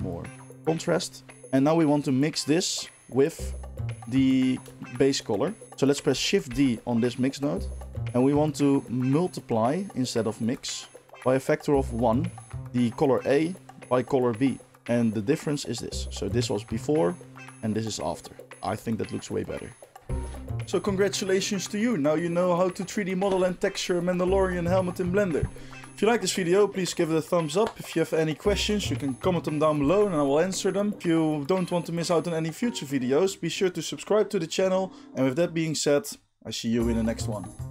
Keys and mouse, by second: 4.3-9.3 shift+middle drag, 5.6 ctrl+z, 6.4 shift+d, 9.3-14.7 drag, 14.7-15.5 middle drag, 15.5-19.9 drag, 19.9-37.7 middle drag.